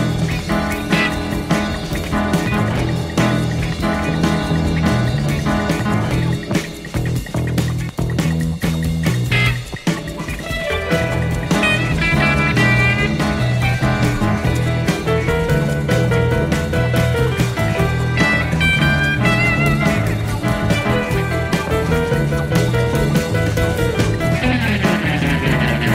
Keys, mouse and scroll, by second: 1.1-2.2 drag, 3.7 click, 5.1 click, 7.2 click, 8.7 click, 10.2-12.0 drag, 12.5 click, 13.8-14.7 drag, 15.3 click, 17.1-18.7 drag, 19.3 click, 20.7-21.8 drag, 23.3 click.